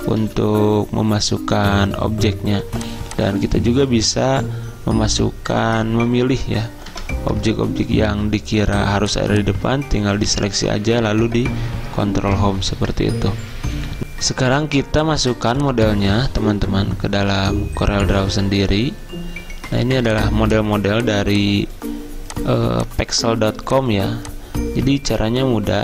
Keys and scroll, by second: 0.3 ctrl+z, 7.1 ctrl+Home, 12.3 ctrl+Home.